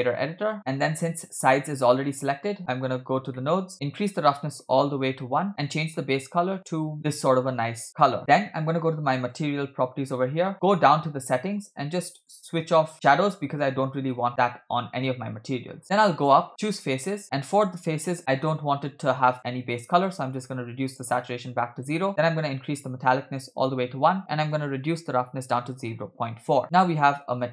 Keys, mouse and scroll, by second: 0.6-2.0 scroll down 4, 2.1 middle click, 2.9-3.4 scroll up 3, 3.4 middle click, 3.7 scroll up 1, 3.8-4.8 drag, 5.5 click, 8.2 middle click, 8.2-9.2 scroll down 3, 9.2 click, 10.9-11.5 scroll down 2, 11.5 click, 12.9-13.7 drag, 15.8-16.8 scroll up 9, 16.8 scroll up 5, 16.8 click, 17.2 middle click, 17.4-18.2 scroll up 1, 18.2 scroll up 2, 18.2 click, 19.3 click, 22.0 middle click, 22.7 click, 24.4-26.3 drag, 26.6 middle click, 26.6 scroll down 2.